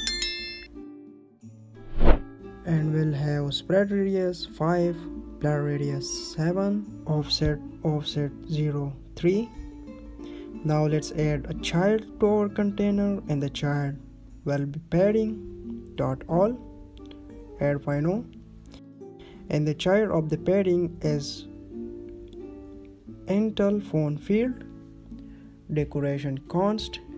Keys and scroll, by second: 0.5 Right, 0.7 Right, 1.0 ctrl+s, 7.2 Down, 7.7 Right, 8.2 Right, 9.6 ctrl+s, 14.4 Down, 16.3 Down, 18.7 Right, 19.2 ctrl+s, 24.6 Down.